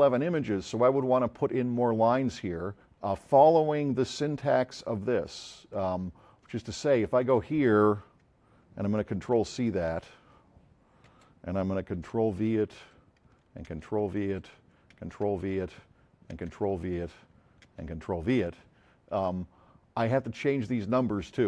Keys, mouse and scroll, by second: 5.2 click, 9.0 c, 9.7 click, 11.0 Return, 12.0 ctrl+v, 12.7 ctrl+Return, 13.7 v, 14.3 Return, 14.9 v, 16.3 v, 17.7 ctrl+v, 20.1 click.